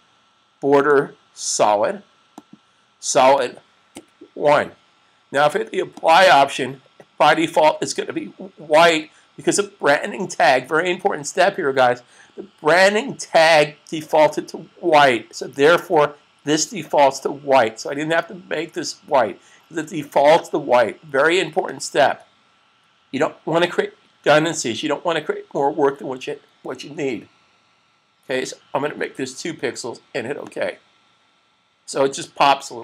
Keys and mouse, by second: 3.8 1, 6.1 typing, 6.2 click, 21.5 click, 28.8 2, 30.2 click.